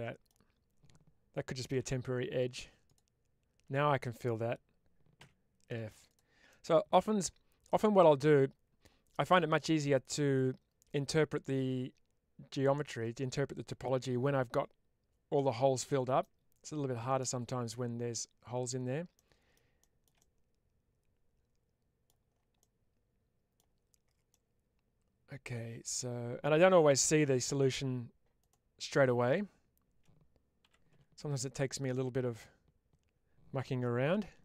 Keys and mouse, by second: 1.6 2, 2.9 alt+click, 5.1 f, 5.6 middle click, 6.0 click, 6.4-8.7 middle drag, 16.1 middle click, 17.5-18.6 middle drag, 19.0 middle click, 21.9 middle click, 22.5 middle click, 24.2-25.8 middle drag, 27.3 1, 28.3 click, 31.3 middle click, 34.0 2.